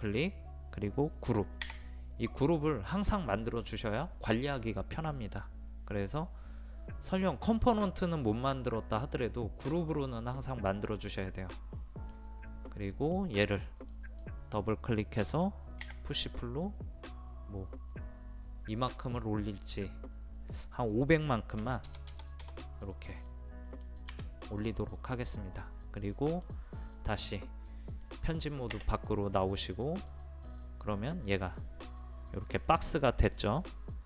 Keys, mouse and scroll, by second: 11.3-11.7 scroll down 1, 12.2-12.7 scroll down 1, 13.8 click, 15.8 p, 16.2 click, 21.6 KP_5, 21.9 KP_0, 23.3 middle click, 29.3 click, 30.5-33.7 middle drag.